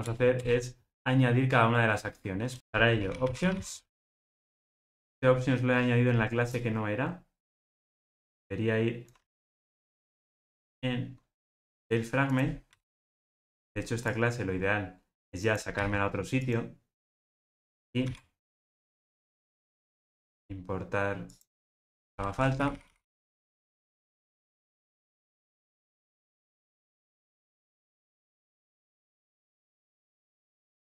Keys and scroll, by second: 0.0 Return, 2.6 alt+shift+Left, 9.2 super+x, 26.6 super+c, 30.6 alt+super+l.